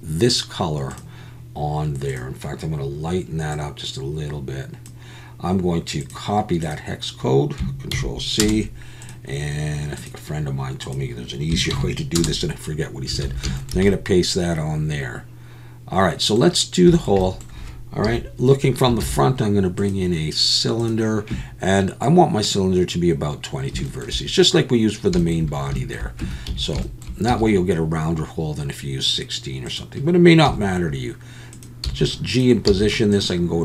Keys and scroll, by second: 13.2 alt+a, 18.0 KP_1, 19.0 shift+a, 26.2 Tab, 26.5 a, 27.3 s, 30.5 g, 31.8 s, 32.7 z.